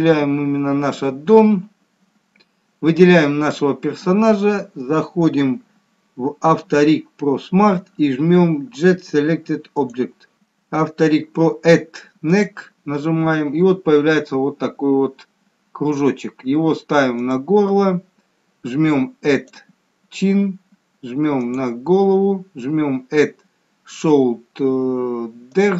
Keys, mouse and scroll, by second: 9.7 click, 10.5 scroll down 2, 12.3 click, 19.4 click.